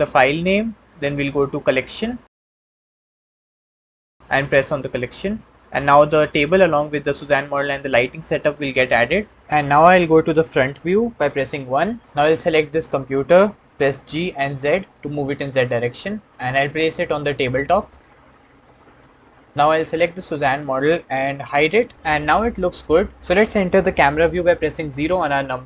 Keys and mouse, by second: 11.3 KP_1, 12.6 click, 13.6 g, 14.1 z, 18.0-18.9 middle drag, 19.9 click, 21.5 h, 22.0-23.2 middle drag, 25.3 KP_0.